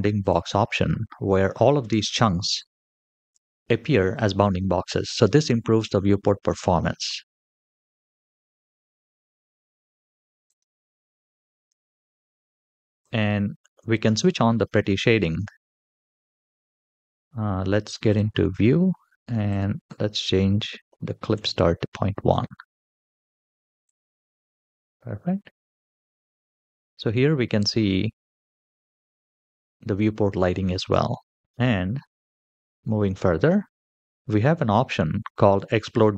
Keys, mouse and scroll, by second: 0.0 click, 1.4-4.2 middle drag, 5.1-6.8 middle drag, 10.2 click, 12.8 click, 17.8 click, 19.2-21.2 drag, 23.6 click, 25.7-26.6 scroll up 2, 26.6-27.2 middle drag, 27.6-28.2 scroll down 2, 28.2-30.8 middle drag, 31.0-31.4 scroll down 2, 31.4 click, 31.4-31.9 scroll up 2, 31.9-33.0 scroll down 5, 33.6-36.1 scroll down 2.